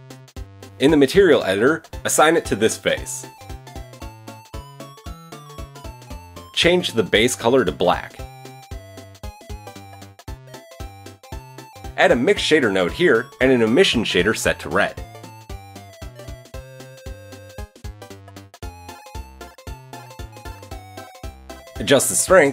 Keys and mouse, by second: 7.2-8.2 middle drag, 9.3-10.0 drag, 10.3 click, 11.8 shift+a, 13.9 click, 14.7 shift+a, 14.8-16.8 drag, 16.7 typing, 17.1-17.7 drag, 21.4-22.5 drag, 21.7 0.